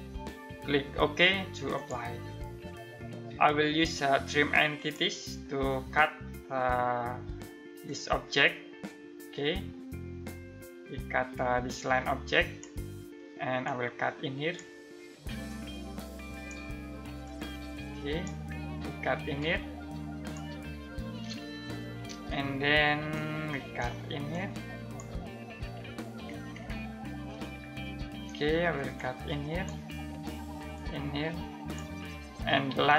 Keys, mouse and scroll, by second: 1.3 click, 4.3 click, 5.5-7.4 scroll down 1, 7.4 click, 20.4 scroll down 1, 21.0-21.6 scroll up 1, 21.9 ctrl+middle click, 23.1 ctrl+middle click, 23.9 click, 25.1-25.7 scroll down 1, 25.7 scroll up 1, 26.8 ctrl+middle click, 28.5 click, 32.6 ctrl+middle click.